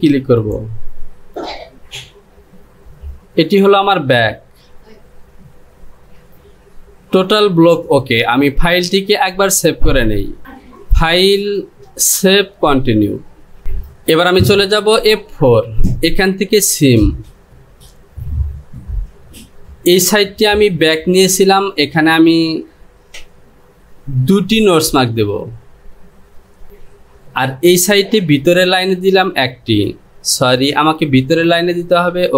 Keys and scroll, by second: 31.3 ctrl+z.